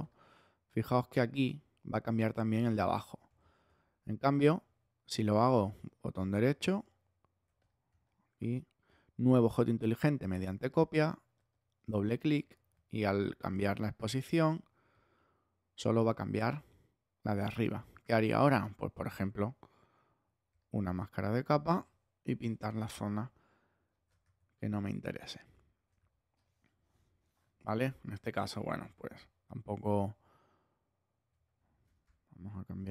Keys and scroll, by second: 3.5 super+z, 22.2 alt+b, 22.7 shift+<, 24.4 shift+<, 26.0 shift+x, 26.9 x, 28.7 super+z, 31.8 ⟲.